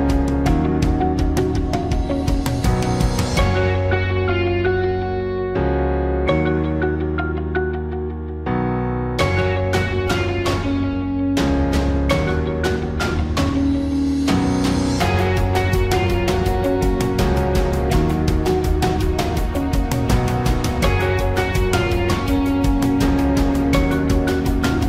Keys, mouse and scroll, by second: 2.0-5.3 right drag, 6.3-11.1 drag.